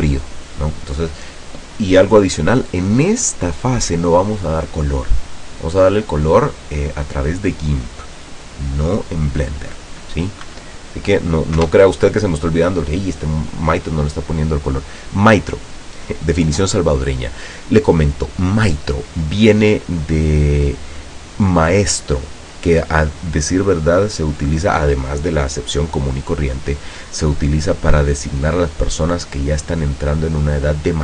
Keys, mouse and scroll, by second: 10.6 Escape, 11.7 KP_0.